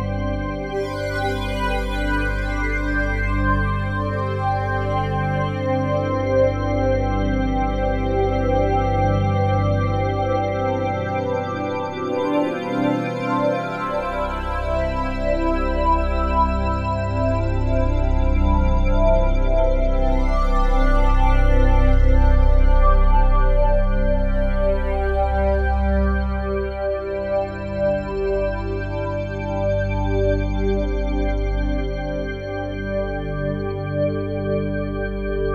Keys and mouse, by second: 1.4-4.1 drag, 1.8 ctrl+z, 4.2 click, 5.1-8.5 alt+shift+drag, 8.8 alt+click, 9.7-12.1 alt+shift+drag, 9.7 typing, 12.1 g, 12.6 x, 13.4-14.5 drag, 15.4-17.3 alt+drag, 17.3 g, 18.9-21.2 drag, 21.6 ctrl+alt+click, 22.2 alt+shift+click, 22.7-25.8 alt+drag, 24.5 typing, 25.8 typing, 26.9 typing, 29.0 click, 29.6 click, 30.2 click, 30.5 g, 31.7 click, 32.2 click, 32.6 g, 33.2 click, 33.7 click, 34.5 click, 35.0 click.